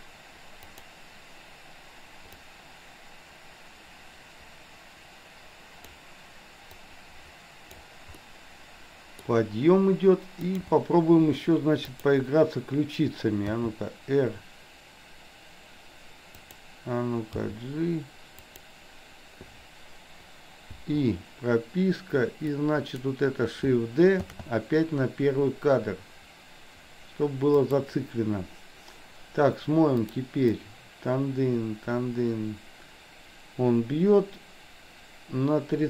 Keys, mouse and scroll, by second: 0.8 click, 2.5-6.0 drag, 6.8 click, 8.1-9.4 middle drag, 10.5 click, 11.9 click, 13.5 r, 17.5 g, 20.8 i, 22.5-23.0 drag, 24.3 shift+d, 30.0 click, 30.5-35.8 drag.